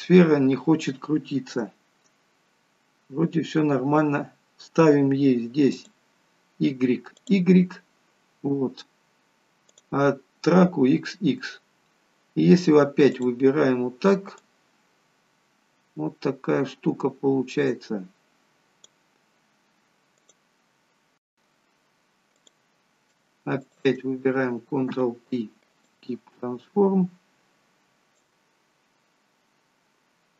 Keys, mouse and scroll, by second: 2.2-2.8 scroll down 1, 2.8-3.5 scroll down 1, 5.9 click, 9.8 click, 13.2 click, 13.7-14.6 scroll down 2, 14.6 click, 19.4-20.2 scroll up 3, 20.2 click, 22.4 click, 23.5 shift+click, 24.8 ctrl+p, 26.5-27.8 scroll down 1, 27.8 scroll down 1, 28.0 click.